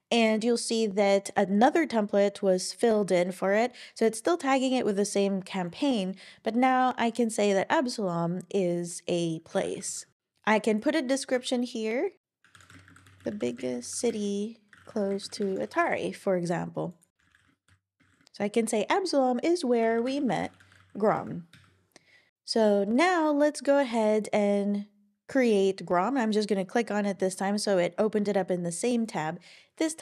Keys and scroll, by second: 9.4-10.4 typing, 11.3 Left, 12.2 alt+BackSpace, 12.3-13.2 typing, 14.3-15.9 typing, 17.0-18.5 typing, 19.6-21.7 typing.